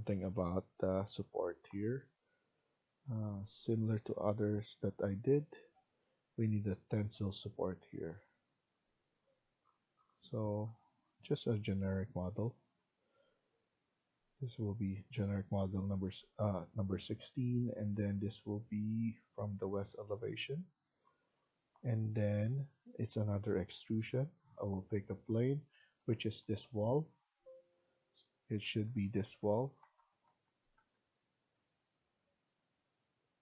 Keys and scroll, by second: 25.7 Tab, 26.1 Tab, 26.7 Tab, 27.1 Tab, 27.6 Tab, 28.4 Tab, 28.8 Tab, 29.2 Tab, 29.7 Tab, 30.2 Tab, 30.7 Tab.